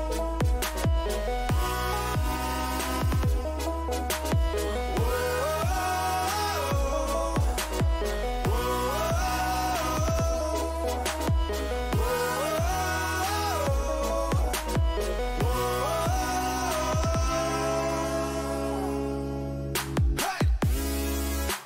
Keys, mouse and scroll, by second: 0.0 a, 1.3 b, 2.3-4.5 drag, 5.8 g, 8.6 a, 10.2-11.8 middle drag, 16.6-21.6 middle drag.